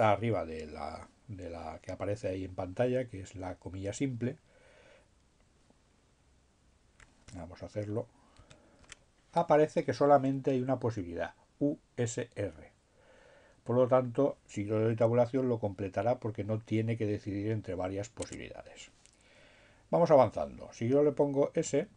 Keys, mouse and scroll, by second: 7.8 alt+shift+', 16.6 Tab, 20.7 s.